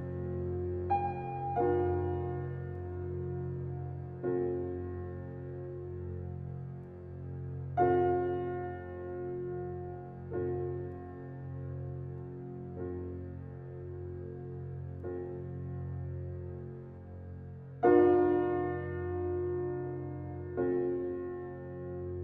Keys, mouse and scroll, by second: 1.2-3.9 drag, 3.9-5.5 alt+drag, 5.5 alt+right click, 7.1 ctrl+s, 8.2 scroll down 1, 8.6 alt+click, 9.1 alt+right click, 9.2 alt+click, 9.6 alt+middle click, 9.9 alt+right click, 10.4 alt+click, 10.9 alt+right click, 11.3 alt+middle click, 11.6-14.0 alt+drag, 14.0 alt+right click, 14.1 alt+click, 15.0 alt+right click, 15.2 alt+middle click, 15.8 alt+right click, 16.2 click, 16.7 alt+right click, 17.1 alt+middle click, 17.7 alt+right click, 18.4-20.4 alt+middle drag, 20.4 ctrl+s, 20.8 space, 21.9 scroll down 1.